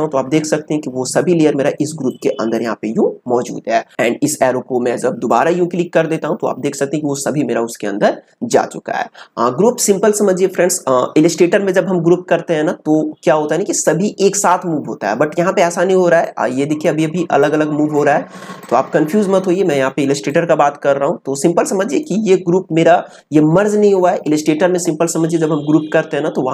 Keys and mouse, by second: 1.8 click, 16.2-24.3 drag.